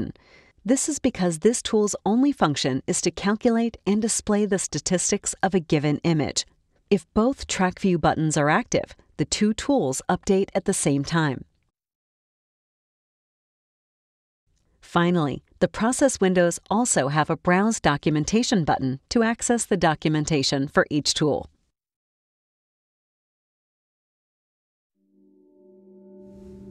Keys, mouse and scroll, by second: 6.3 click, 7.7 click, 8.6 middle click, 8.6 click, 9.5 click, 11.3 click, 12.0 click, 13.0 click, 19.1 click, 23.6-26.7 drag.